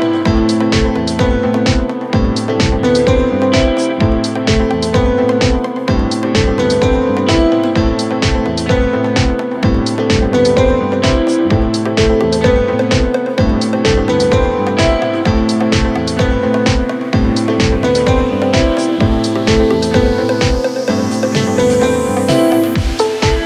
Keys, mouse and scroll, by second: 7.8 alt+scroll down 1, 10.4-11.2 alt+scroll up 1, 12.5-17.3 drag, 20.4 ctrl+Num_Lock, 20.4 ctrl+click.